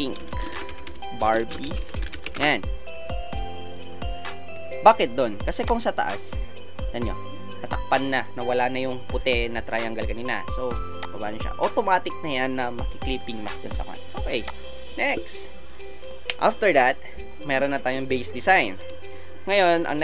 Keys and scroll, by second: 0.3-3.0 typing.